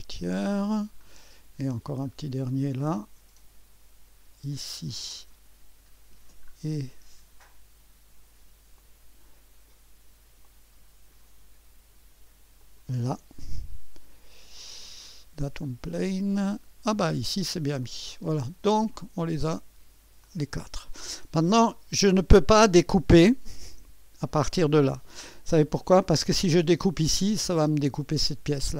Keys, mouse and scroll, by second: 0.8 click, 1.1-1.9 scroll down 2, 2.1-3.1 scroll up 3, 2.5 click, 2.7 click, 4.5-5.6 drag, 6.5-7.3 scroll up 1, 8.8-12.0 drag, 12.6-13.7 drag, 15.6-16.8 drag, 17.0-17.9 scroll down 1, 17.9-19.0 drag, 17.9-19.5 scroll down 1, 19.5 click, 20.3-23.2 drag, 23.7 2, 25.8-28.6 scroll up 1.